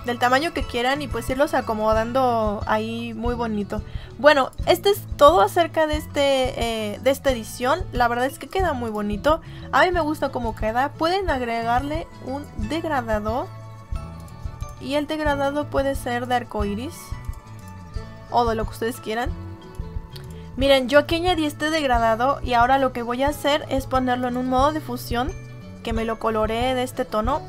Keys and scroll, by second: 25.1 Down.